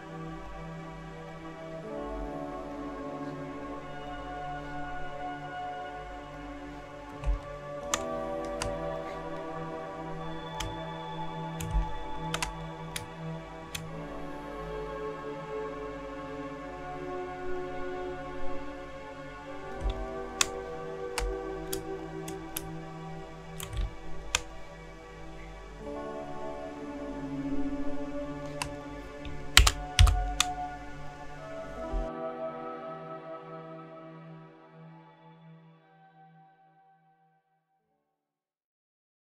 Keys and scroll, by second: 7.2 space, 11.7 space, 19.8 space, 23.7 space, 29.6 ctrl+0, 30.0 ctrl+-.